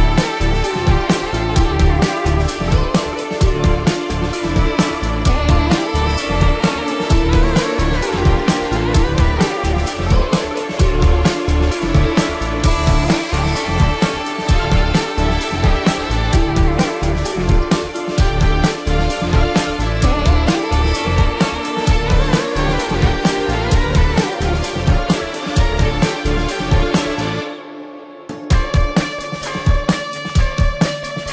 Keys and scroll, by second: 0.0 ctrl+-, 0.5 ctrl+-, 0.6 space, 0.8 ctrl+-, 0.9 ], 1.3 ctrl+-, 1.7 ctrl+-, 2.1 space, 2.4 ctrl+-, 2.6 ], 3.5 space, 3.8 ], 4.3 ctrl+-, 6.2 ctrl+=, 7.0 ctrl+=, 7.4-9.6 typing, 8.2 ctrl+-, 8.6 ctrl+-, 10.7 space, 12.4 space, 17.7 ], 19.2 ctrl+-, 19.4-22.6 typing, 20.6 ctrl+alt+z, 23.6 space, 27.5 space, 31.1 ctrl+alt+z.